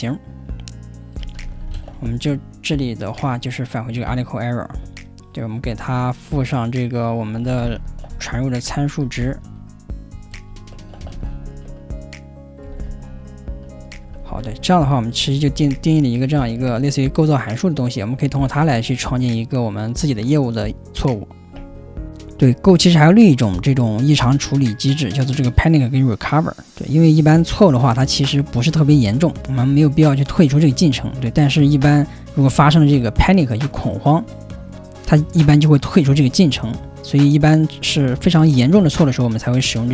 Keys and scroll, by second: 0.9-3.2 typing, 4.8 Return, 5.7 Return, 7.2-19.0 typing.